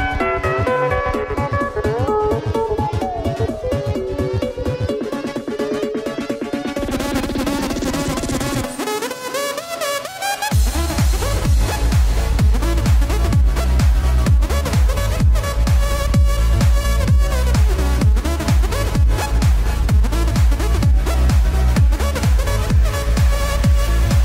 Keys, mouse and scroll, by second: 0.9 g, 2.3 g, 7.1 middle drag, 7.6 r, 8.9 g, 10.1 alt+r, 10.3 click, 10.7 click, 11.0 click.